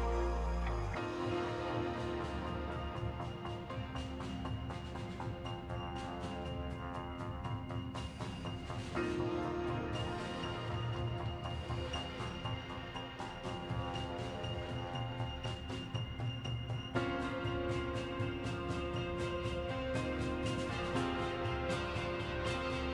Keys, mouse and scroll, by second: 7.6 shift+d, 15.5-20.7 drag.